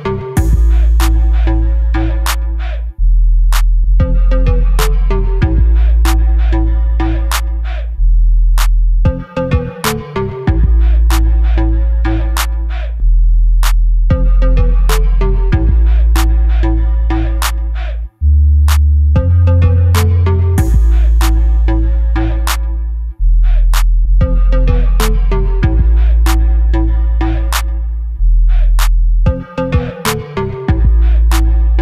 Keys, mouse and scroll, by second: 0.2 click, 0.5 middle click, 1.1-2.9 typing, 3.2-5.4 middle drag, 3.9 scroll up 1, 4.4 e, 5.4 click, 5.5-6.5 middle drag, 6.5 click, 6.7 middle click, 7.2 shift+click, 7.5-9.2 right drag, 9.2 click, 9.4 scroll down 1, 9.8-13.8 middle drag, 13.8 KP_1, 14.1 KP_3, 14.5 scroll up 1, 15.2 Tab, 15.8 1, 16.6 click, 16.9 g, 17.8 Escape, 18.0 shift+z, 18.5-21.0 drag, 19.3 g, 21.9 g, 23.4-24.5 drag, 23.6 g, 24.7 scroll down 1, 25.1 Tab, 25.3 click, 25.4 scroll down 1, 25.7-28.4 middle drag, 26.2 shift+z, 26.5 scroll down 1, 28.4 click, 28.7 Tab, 29.4 3, 29.6 click, 30.0 i, 30.9 click.